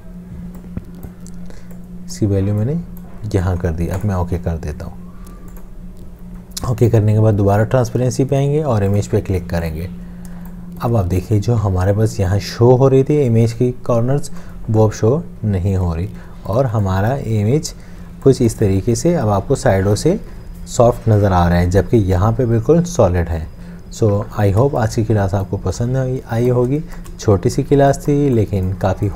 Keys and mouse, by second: 10.4 space, 16.3 space, 17.7 space, 24.7 space, 25.3 click, 26.0 click, 27.3 shift+click, 27.7 space, 28.4 click.